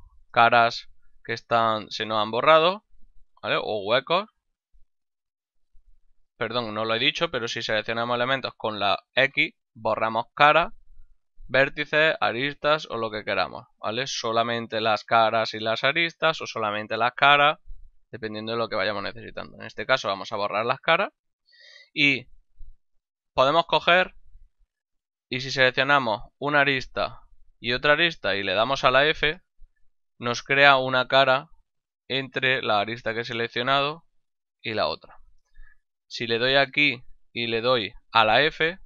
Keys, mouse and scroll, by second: 0.4 shift+right click, 0.8 ctrl+middle click, 3.4 shift+right click, 4.0 x, 5.0 click, 6.5 ctrl+z, 9.5 x, 19.7 click, 21.0 middle click, 22.9 middle click, 23.3 ctrl+Tab, 24.4 click, 25.3 right click, 25.7 shift+middle click, 27.9 shift+right click, 29.3 f, 34.2 middle click, 36.1 right click.